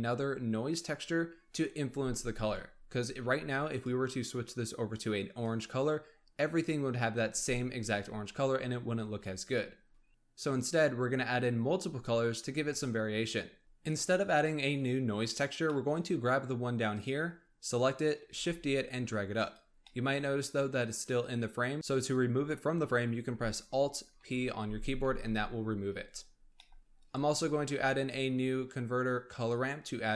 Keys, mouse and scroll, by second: 3.7 click, 13.6-16.9 middle drag, 16.9 click, 18.3 shift+d, 19.8 middle click, 20.3-21.7 scroll up 1, 24.1 alt+p, 25.1 g, 26.5-27.0 middle drag, 27.0 click, 27.6 shift+a.